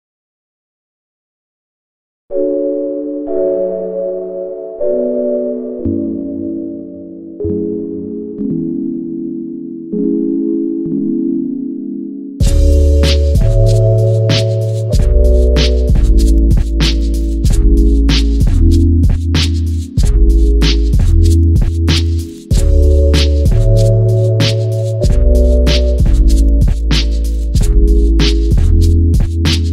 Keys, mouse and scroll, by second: 0.0 click, 0.1 scroll up 1, 0.5 shift+z, 1.3 z, 1.7 Tab, 2.1-6.5 middle drag, 4.5 KP_3, 5.0 shift+z, 5.3-5.7 scroll up 1, 6.0-6.5 scroll up 1, 6.5 click, 7.4 g, 8.3 click, 8.7 scroll down 1, 8.9 shift+z, 9.1 click, 9.2-9.9 scroll down 2, 9.5-11.8 middle drag, 10.7 KP_3, 11.2 scroll up 1, 11.5 Tab, 11.8 click, 12.3-13.2 scroll up 1, 14.0 shift+a, 14.6 ctrl+z, 15.1 shift+right click, 15.9 shift+a, 16.5 s, 17.2 click, 18.1 r, 19.0 KP_Enter, 19.3 g, 20.1 click, 20.3 scroll down 1, 20.5-23.3 middle drag, 21.4 s, 23.3 click, 23.5 KP_7, 24.0 shift+z, 24.5 g, 25.8 click, 26.1 shift+d, 27.6 click, 28.2 scroll down 1, 28.9 shift+d.